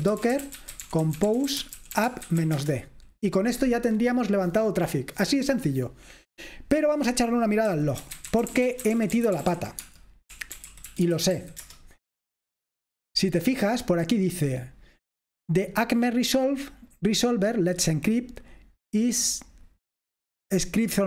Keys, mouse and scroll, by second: 0.0-2.9 typing, 7.6-11.9 typing, 15.7-18.9 drag.